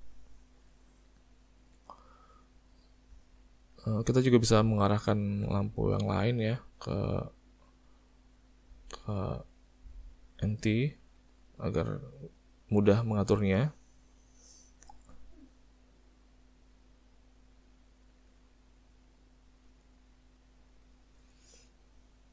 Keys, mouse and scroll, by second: 1.4 middle click, 2.9 middle click, 3.6 middle click, 5.1 click, 6.0 click, 9.0 click, 11.2 click, 14.6 click, 16.6 click, 18.2 middle click, 19.2 click, 19.9 middle click, 20.9 click, 21.4 middle click, 22.2 click.